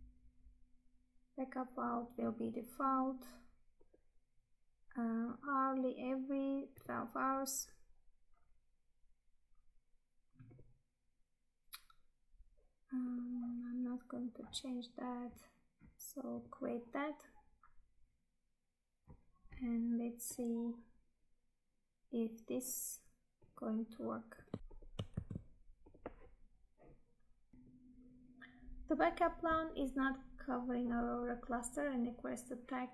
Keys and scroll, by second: 25.0 ctrl+v.